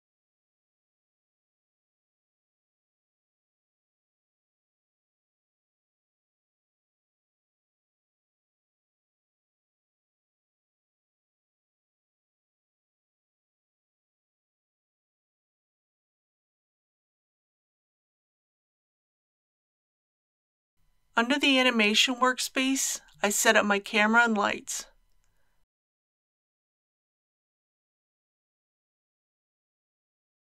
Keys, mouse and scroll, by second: 1.4 click, 2.7 Tab, 4.2 KP_3, 5.3 shift+middle click, 6.1 shift+middle click, 6.4 scroll up 1, 6.6 shift+middle click, 7.7 shift+a, 8.0 click, 9.0 ctrl+p, 9.2 click, 9.5 KP_3, 10.3 scroll down 1, 10.4 middle click, 10.8 KP_3, 11.6 shift+right click, 12.4 shift+right click, 12.8 scroll up 1, 14.3 shift+a, 14.7 click, 15.0 shift+click, 15.4 ctrl+p, 15.6 click, 16.0 shift+middle click, 17.4 shift+a, 17.7 click, 18.1 shift+click, 18.6 ctrl+z, 18.8 shift+click, 19.2 ctrl+p, 19.4 click, 19.6 Tab, 19.8 scroll down 1, 20.1 middle click, 20.4 middle click, 20.7-21.4 scroll down 1, 21.4 click, 27.7 n, 29.1 click.